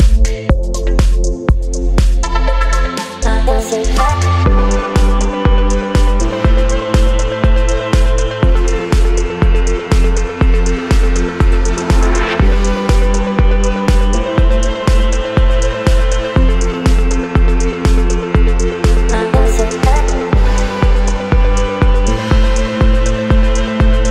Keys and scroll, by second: 2.2 ctrl+g, 5.4 space, 8.4 Delete, 11.8 Left, 13.0 ctrl+t, 15.3 Return, 16.1 ctrl+t, 17.1 Return, 18.8 ctrl+g, 20.9 ctrl+t, 21.3 Return, 23.0 ctrl+t, 23.3 Return.